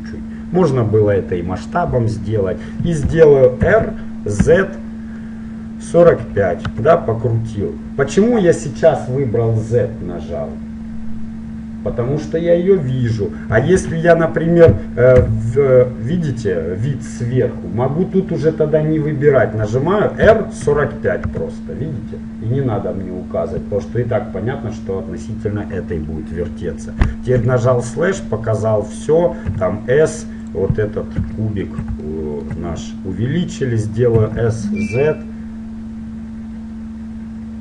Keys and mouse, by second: 0.1-3.2 middle drag, 3.7 r, 13.9 ctrl+z, 15.3 KP_7, 20.3 r, 26.3-31.4 middle drag, 27.5 KP_Divide, 29.7 s, 31.4 KP_1, 34.3 s.